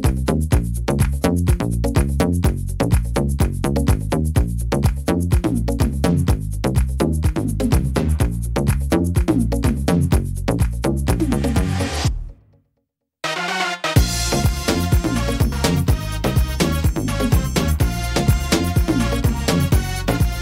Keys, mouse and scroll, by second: 0.8 middle click, 1.1-1.7 scroll down 2, 1.7 shift+middle click, 2.3-2.8 scroll up 2, 2.6 middle click, 3.1 shift+middle click, 3.7 right click, 4.6 middle click, 5.6 ctrl+z, 6.1 middle click, 7.0 shift+right click, 7.4 shift+right click, 7.9 shift+right click, 8.3 shift+right click, 8.9 shift+right click, 9.3 middle click, 10.6 e, 14.5 middle click, 15.3 right click, 15.6 shift+right click, 16.0 right click, 16.4 shift+right click, 17.9 s.